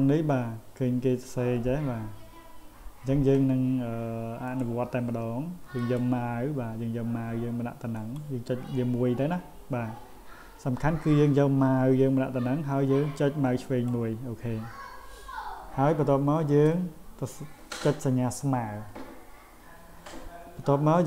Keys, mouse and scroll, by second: 4.5 click, 5.8 click, 8.0 click, 13.7 click.